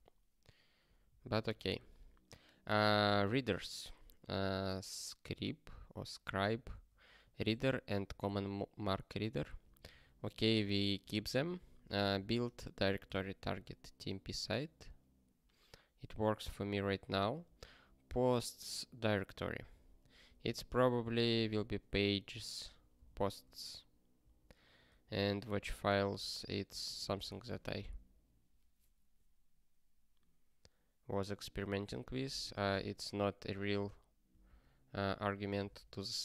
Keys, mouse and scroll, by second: 1.0 ctrl+n, 1.3 ctrl+n, 1.7 ctrl+p, 3.1 ctrl+space, 3.2 ctrl+e, 7.4 ctrl+g, 8.2 ctrl+space, 8.4 ctrl+a, 9.4 ctrl+g, 11.1 ctrl+n, 11.3 ctrl+n, 11.8 ctrl+p, 12.1 ctrl+space, 12.3 ctrl+n, 13.0 ctrl+g, 16.8 ctrl+n, 17.6 ctrl+e, 19.5 alt+b, 20.0-21.5 typing, 21.5 ctrl+s, 23.4 ctrl+s, 24.2 ctrl+n, 24.9 ctrl+a, 26.0 ctrl+space, 26.1 ctrl+e, 26.8 ctrl+g, 27.4 ctrl+s, 32.7 ctrl+space, 32.8 ctrl+a, 33.7 ctrl+g, 34.5 ctrl+k, 35.1 ctrl+k, 35.7 ctrl+s.